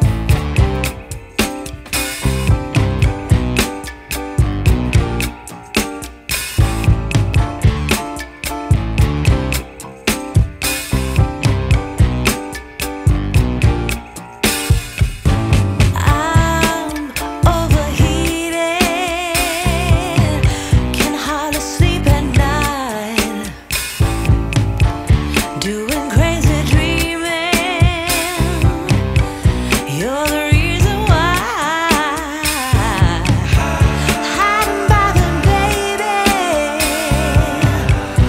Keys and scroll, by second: 1.8 ctrl+r, 2.1 F3, 2.4 Escape, 3.3 ctrl+r, 3.6 Escape, 7.2 ctrl+z, 11.1 ctrl+r, 13.9 ctrl+z, 14.3 Escape, 14.9 ctrl+r, 18.1 ctrl+r, 19.4 ctrl+r, 20.1 Escape, 20.7 F2, 32.6 ctrl+l, 33.4 space, 33.6 Escape, 35.2 ctrl+z, 36.0 ctrl+k, 37.4 Escape.